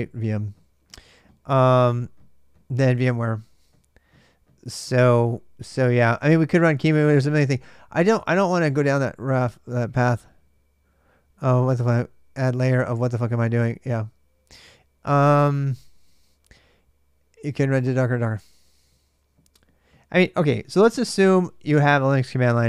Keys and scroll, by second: 21.0 BackSpace.